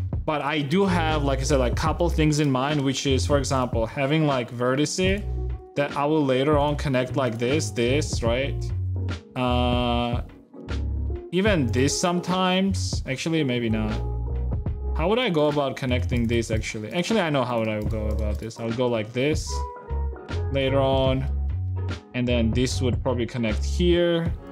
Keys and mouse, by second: 3.5 d, 4.9 e, 5.4-6.4 right drag, 6.4 e, 6.7 shift+click, 7.7 e, 11.8 shift+middle click, 13.0 ctrl+z, 15.0 ctrl+r, 15.8 ctrl+r, 16.2 a, 17.3 e, 18.9 a, 18.9 f, 19.5 ctrl+z, 20.0 ctrl+z, 20.5 f, 20.6 a, 20.7 click, 21.0 g, 22.1 g, 22.6 g, 23.0 e, 24.2 g.